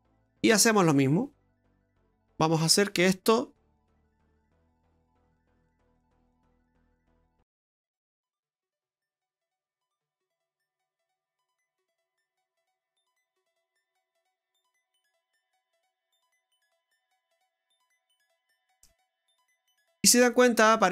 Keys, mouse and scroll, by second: 0.5-1.4 scroll down 2, 0.9 middle click, 3.1 click, 5.0 click, 5.6-6.2 scroll up 8, 6.2 middle click, 6.7-7.5 scroll up 2, 7.5 scroll up 1, 7.7 middle click, 8.3-9.0 scroll up 1, 9.0 scroll up 1, 9.7 click, 11.5 click, 16.6 click, 19.6-20.0 scroll down 3, 20.0 middle click.